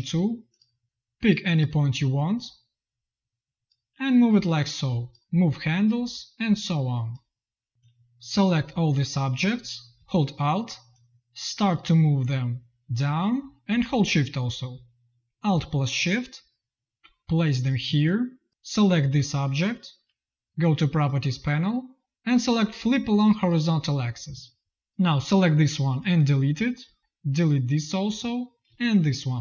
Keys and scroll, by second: 17.8 z, 18.5 v, 25.1 Delete.